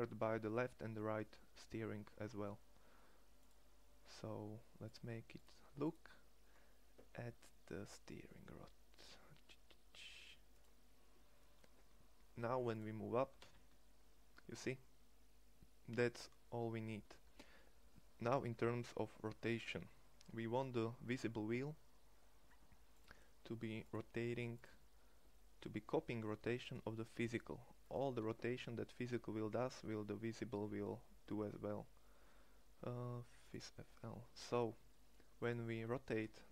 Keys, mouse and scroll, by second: 13.2-16.4 drag, 13.2 g, 36.2-36.5 drag, 36.2 r.